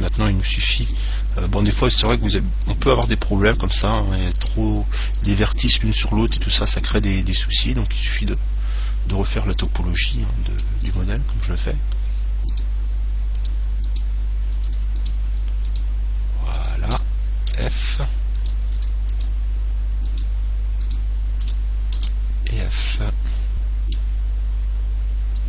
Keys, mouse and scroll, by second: 1.1 right click, 1.5 middle click, 1.9-5.3 middle drag, 5.4-9.5 right drag, 10.1-10.4 scroll down 2, 10.2 middle click, 10.4-12.8 middle drag, 12.8-18.6 right drag, 17.9 f, 18.8-22.8 right drag, 22.3 f, 23.1-25.1 middle drag.